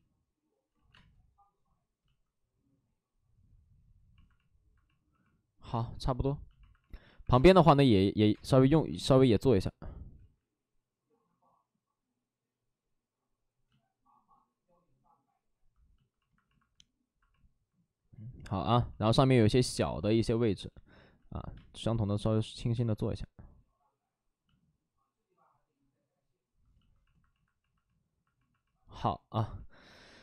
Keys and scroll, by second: 0.6 ctrl+z, 0.8 space, 4.9 ctrl+z, 7.1 Up, 8.8 x, 10.1 ctrl+z, 13.0 x, 19.6 space, 21.4 space, 28.1 space.